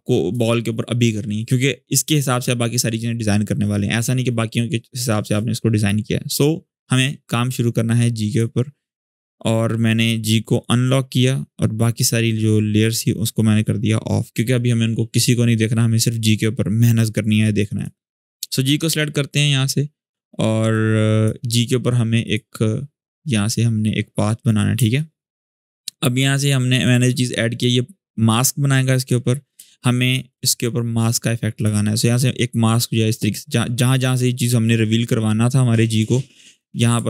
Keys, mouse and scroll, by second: 8.0 click, 10.2 click, 12.6-14.2 drag, 20.4-21.1 drag, 23.6-24.5 scroll up 1, 24.5 space, 24.7 click, 25.0-25.3 space, 26.6 click, 29.0 scroll up 1, 29.3 space, 29.5 click, 29.8-30.1 space, 31.3-32.9 drag.